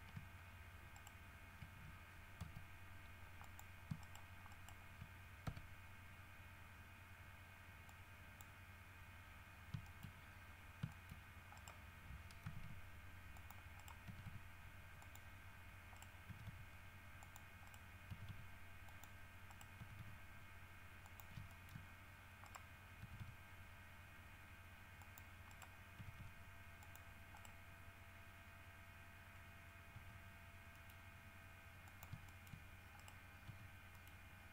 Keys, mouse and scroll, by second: 1.1 shift+right click, 2.6 z, 3.6 click, 4.2 shift+right click, 4.7 shift+right click, 5.6 shift+w, 8.1 click, 10.0 shift+middle click, 11.1 shift+middle click, 11.8 shift+right click, 12.6 g, 13.5 click, 14.0 right click, 14.2 g, 15.2 click, 16.2 right click, 16.5 g, 17.4 click, 17.8 right click, 18.3 g, 19.1 click, 19.7 right click, 20.0 g, 21.2 click, 21.7 shift+middle click, 22.0 shift+scroll up 1, 22.6 right click, 23.2 g, 25.2 click, 25.7 right click, 26.2 g, 27.0 click, 27.6 right click, 30.1 g, 30.9 middle click, 32.0 shift+click, 32.5 shift+middle click, 33.2 shift+right click, 33.7 g, 34.1 middle click.